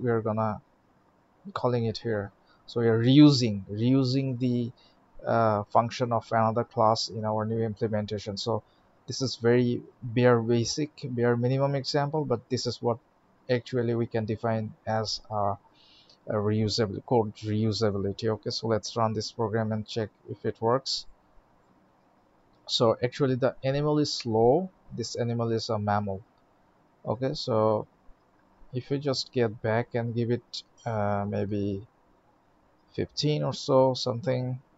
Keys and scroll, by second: 18.5 alt+shift+x, 33.8 ctrl+s.